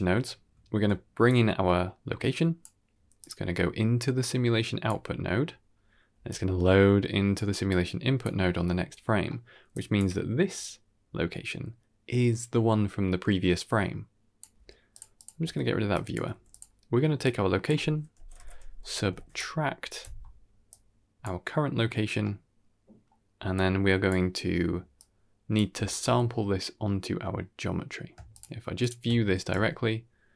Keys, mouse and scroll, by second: 1.1-3.1 drag, 4.1 click, 5.6-6.0 scroll down 1, 6.0 d, 6.2-7.2 drag, 7.2-7.6 d, 7.6 click, 8.1 d, 9.0 d, 9.2 middle click, 9.6-9.9 drag, 10.4-14.9 drag, 15.0 click, 15.3 x, 15.8 click, 16.2 g, 17.1-19.9 drag, 20.6-21.1 drag, 22.1 middle click, 23.4 click, 24.9 click, 28.2 ctrl+shift+click, 28.7 ctrl+shift+click, 29.4 g.